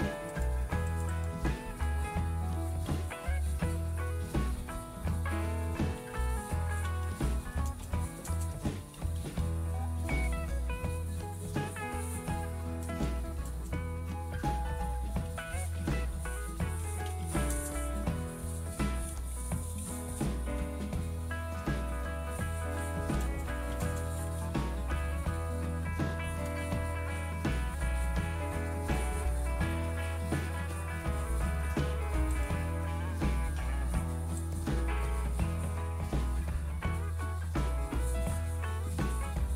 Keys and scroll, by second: 0.0-1.7 typing, 4.1-11.0 typing, 12.5-18.8 typing, 20.7-22.5 typing, 23.9 Return, 38.7-39.5 typing.